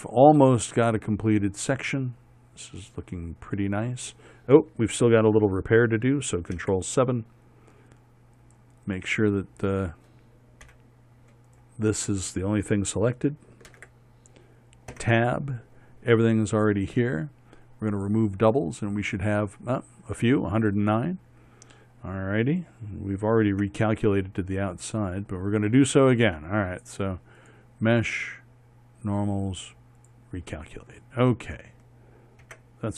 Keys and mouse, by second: 7.2 ctrl+KP_7, 8.3 middle click, 11.3 KP_1, 12.1-14.4 middle drag, 14.4 ctrl+KP_7, 14.6 middle click, 15.6 Tab, 24.2 Tab, 26.4 Tab.